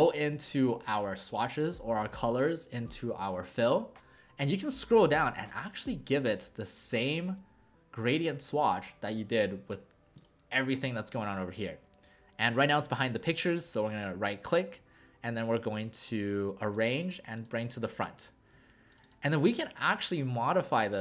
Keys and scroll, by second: 19.4 ctrl+a.